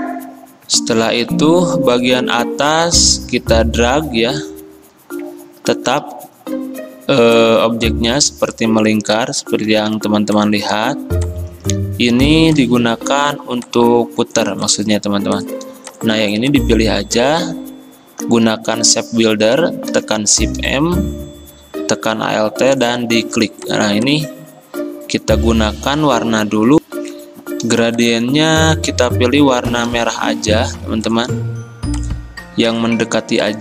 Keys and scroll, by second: 1.2 F10, 1.2 a, 5.7 v, 9.7 ctrl+z, 17.0 ctrl+z, 19.9 m, 26.3 v, 27.1 F10.